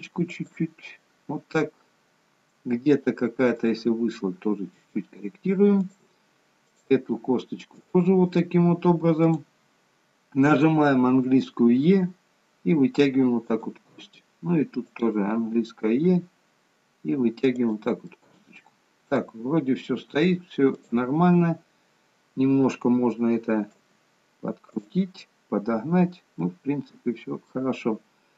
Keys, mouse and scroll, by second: 3.6 click, 4.0 g, 7.0 click, 7.2 g, 11.7 e, 14.9 click, 16.0 e, 18.1 scroll up 1, 18.2 middle click, 19.6-20.7 scroll down 1, 20.7 click, 26.3 middle click.